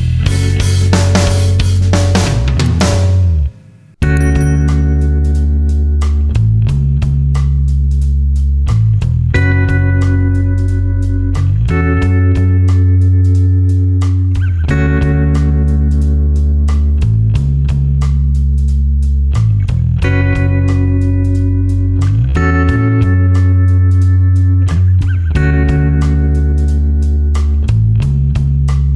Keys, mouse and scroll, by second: 0.2 alt+click, 0.7 alt+click, 6.4 click, 6.7 z, 6.9 alt+click, 7.7 alt+click, 9.1 ctrl+space, 9.1 ctrl+alt+click, 9.7 click, 9.9 alt+click, 10.4 ctrl+space, 10.5 ctrl+click, 11.1 click, 13.1 alt+click, 13.5 ctrl+space, 13.9 ctrl+click, 14.6 alt+click, 15.3 alt+click, 15.7 space, 16.7 alt+click, 17.6 ctrl+space, 18.2 click, 19.5 space, 19.8 alt+click, 21.5 alt+click, 22.1 ctrl+click, 23.2 alt+click, 23.7 space, 23.9 ctrl+alt+click, 24.2 alt+click, 24.7-25.8 typing, 24.8 click, 25.5 ctrl+alt+click, 25.7 click, 26.1 click, 27.7 Delete, 28.9 click.